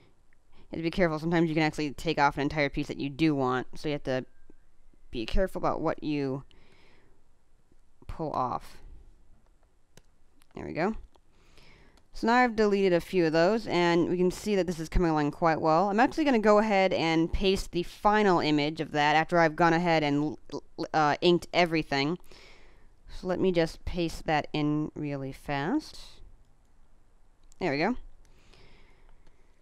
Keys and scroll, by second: 10.8 space, 14.7 space, 19.8 space, 29.1 space.